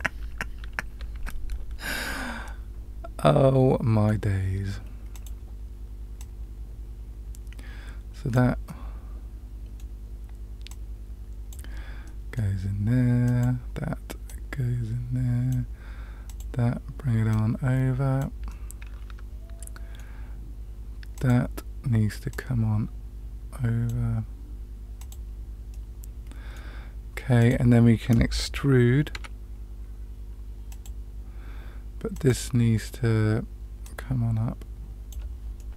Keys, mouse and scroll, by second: 2.0-4.1 middle drag, 5.1 click, 6.1-8.3 drag, 8.6-9.8 middle drag, 10.6 click, 12.0 middle click, 13.2 click, 14.2-15.5 drag, 16.2 click, 17.3 click, 18.4-20.0 middle drag, 21.1 click, 22.3-23.9 drag, 24.9 click, 25.7 middle click, 27.3 click, 29.1 e, 32.1 click, 33.8-35.1 drag, 35.5-35.7 middle drag.